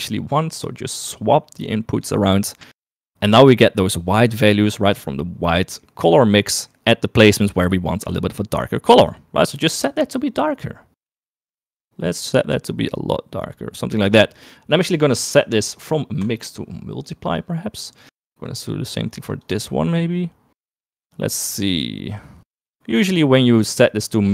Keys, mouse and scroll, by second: 1.4 click, 7.5-8.6 shift+middle drag, 16.3-17.5 drag, 18.6 click, 21.8-23.4 drag, 24.1 click.